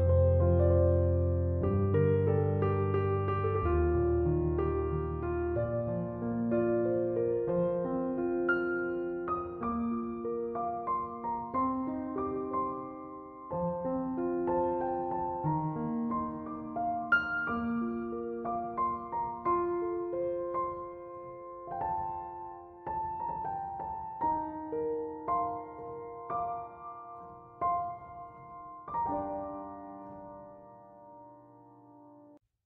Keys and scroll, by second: 27.6-29.8 typing, 30.1 Return.